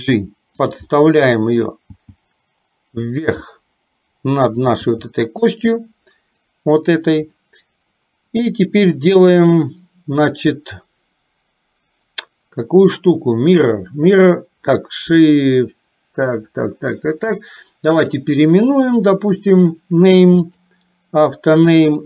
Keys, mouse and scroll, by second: 0.0 g, 1.0 middle click, 2.0 g, 3.6-4.7 middle drag, 4.9 g, 18.1-20.7 drag.